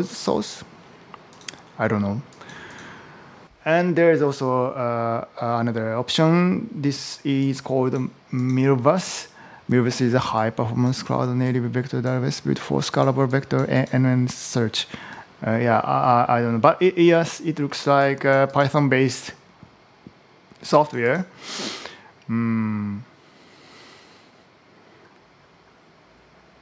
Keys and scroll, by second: 3.4 Return.